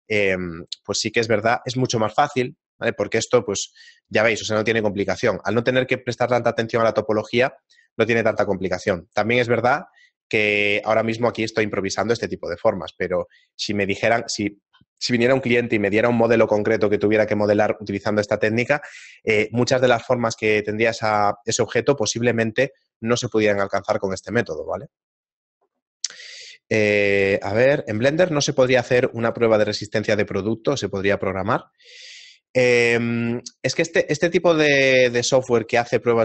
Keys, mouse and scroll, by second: 3.6 right click, 4.1 middle click.